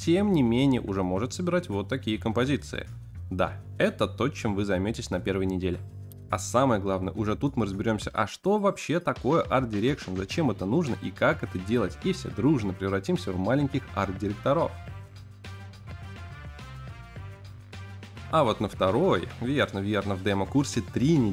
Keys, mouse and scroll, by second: 0.0-0.5 typing, 0.1 click, 0.1 scroll down 2, 0.1 middle click, 0.3 click, 0.5 middle click, 0.7 click, 0.7 scroll up 4, 1.1 click, 1.3 click, 18.3 ctrl+b, 18.3 shift+click, 18.3 middle click, 19.1 alt+shift+click, 19.1 middle click, 19.1 scroll up 2, 19.2 ctrl+b, 19.5 Tab, 19.7 Tab, 19.7 click, 19.8 middle click, 20.4 scroll up 3, 20.4-21.3 typing, 20.6 shift+middle click, 20.8-21.2 scroll down 3, 20.8 middle click, 21.0 shift+middle click.